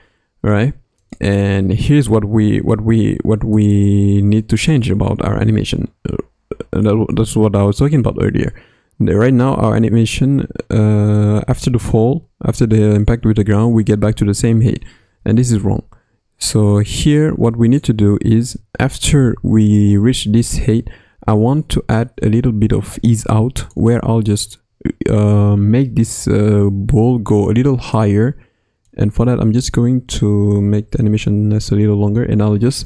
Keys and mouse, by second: 1.0 click, 1.7 space, 2.3 space, 13.3 space, 13.8 space, 16.4-17.8 drag, 21.9-23.7 drag, 28.1 click, 30.4 Right, 32.5 g.